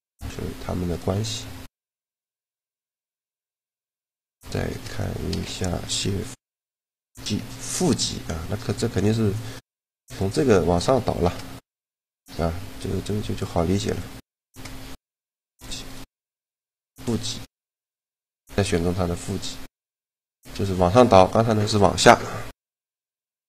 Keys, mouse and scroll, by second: 0.7-2.2 middle drag, 1.0 g, 2.2 right click, 5.1 ctrl+space, 6.4 shift+g, 10.0-11.8 right drag, 10.8 shift+g, 12.9 middle click, 13.8 click, 14.3 shift+g, 15.0 right click, 15.7 right click, 16.0 shift+g, 16.5-17.5 drag, 17.5 shift+g, 19.2-23.0 middle drag, 23.0 shift+g.